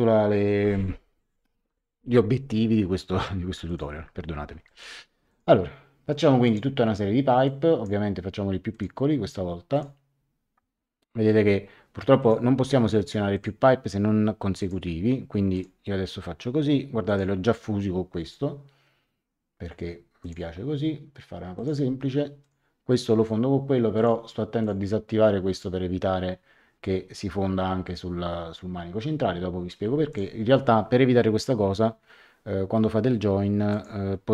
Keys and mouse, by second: 3.6 click, 6.4 click, 8.7 click, 9.7 click, 12.2 click, 13.3 click, 14.5 click, 17.0 click, 20.2 click, 21.5 click, 23.9 click, 30.1 click, 33.7 click.